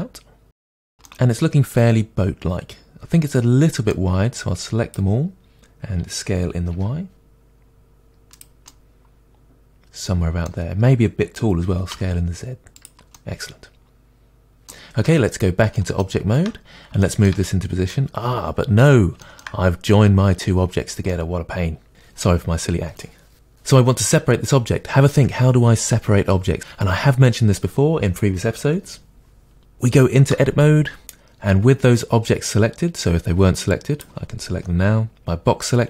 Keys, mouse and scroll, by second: 0.4 middle click, 0.9 Tab, 1.0-4.4 middle drag, 4.4 click, 6.0 s, 8.4 click, 8.6-9.0 middle drag, 9.6-12.8 middle drag, 11.7 s, 12.8 drag, 13.1-15.0 middle drag, 15.0 Tab, 15.8 middle click, 16.3-16.7 shift+scroll down 2, 17.0 shift+middle click, 17.4 middle click, 18.3 scroll up 1, 19.2 shift+middle click, 21.1 middle click, 30.2 Tab, 33.7 click.